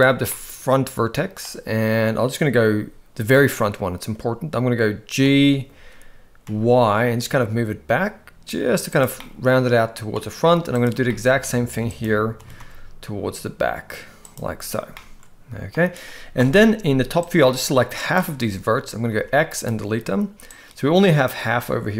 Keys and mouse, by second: 0.3-1.4 middle drag, 5.2 g, 9.2 middle click, 10.8 click, 11.1 middle click, 12.0 click, 12.4 g, 14.9 middle click, 16.4 KP_7, 17.2 click, 19.1 x, 20.5-21.3 drag.